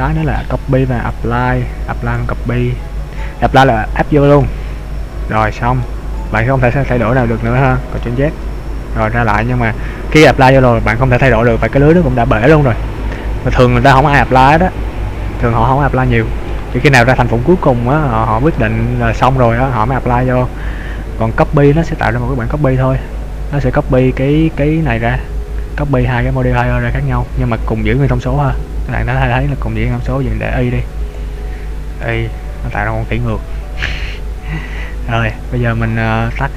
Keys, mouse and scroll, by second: 0.2 click, 1.1 click, 2.1 click, 4.4 click, 5.9 middle click, 8.3 ctrl+z, 13.2 middle click, 16.9 middle click, 21.9 click, 23.2-24.6 scroll down 3, 24.6-25.0 scroll up 2, 29.2-30.7 scroll down 1, 30.7 click, 31.3 click, 32.5 click, 34.6-35.4 scroll up 1, 35.4-35.9 scroll up 1.